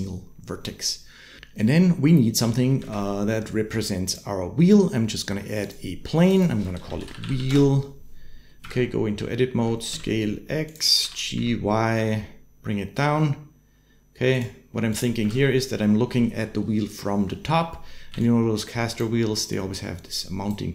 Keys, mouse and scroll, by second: 2.6 shift+a, 6.2-7.3 shift+drag, 7.0 e, 8.4 Tab, 9.4 s, 10.8 g, 14.7 click, 15.0 Tab, 17.9-20.7 d, 18.0 click, 19.3-20.3 drag.